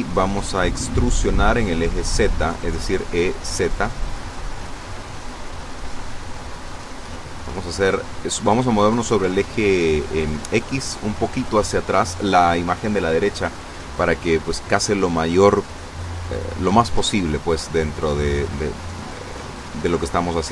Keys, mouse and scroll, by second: 2.1 click, 4.2 n, 5.1 scroll down 1, 6.9 click, 7.4 click, 17.8 n.